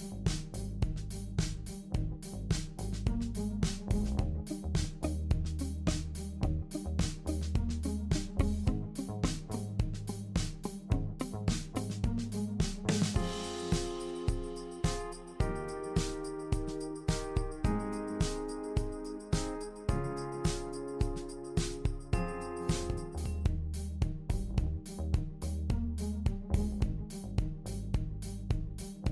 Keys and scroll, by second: 0.4-1.6 typing, 2.9-5.1 typing.